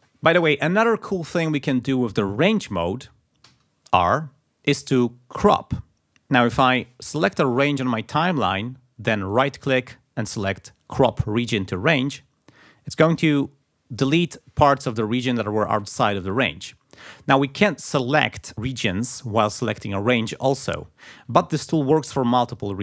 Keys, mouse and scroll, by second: 3.5 r, 7.2-8.4 drag, 11.8 click, 21.6 ctrl+z, 22.3 g, 22.6 click.